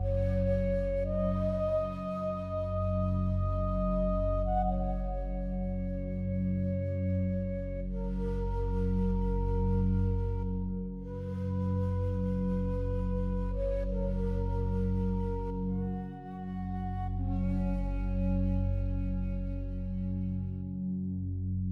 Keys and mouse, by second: 0.7 click, 1.6 click, 3.1 click, 4.0-5.5 drag, 6.4 ctrl+alt+click, 7.5 ctrl+alt+click, 8.1 ctrl+alt+click, 8.7 alt+shift+click, 10.3 click, 11.4 click, 12.3 ctrl+alt+click, 12.7 alt+shift+drag, 13.7 click, 14.6 click, 15.6 click, 16.2 click, 17.3-17.7 alt+drag, 18.8-20.2 alt+drag.